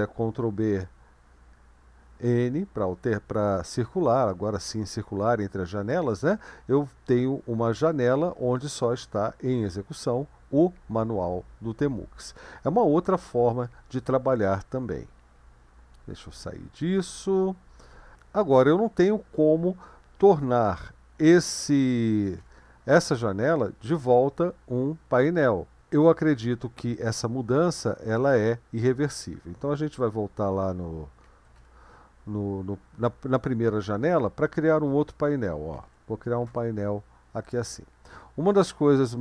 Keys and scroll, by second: 0.4 ctrl+b, 1.4 n, 15.4 q, 22.1 ctrl+b, 22.4 n, 31.3 ctrl+b, 31.6 n, 35.8 ctrl+b, 36.5 %.